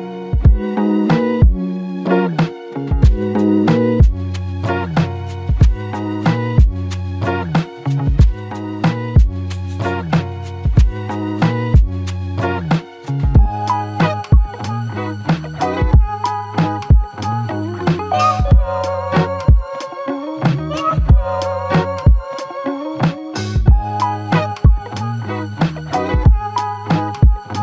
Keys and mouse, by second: 16.3 shift+click.